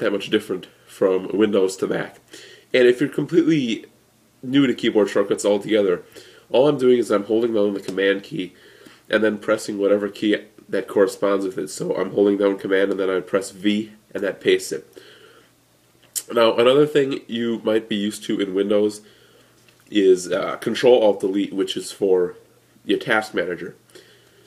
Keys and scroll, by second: 13.5 super+v.